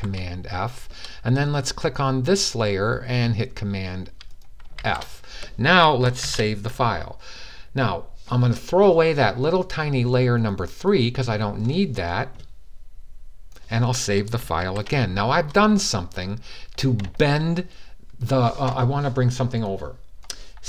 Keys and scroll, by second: 4.5 super+f, 6.0 super+s, 14.4 super+s.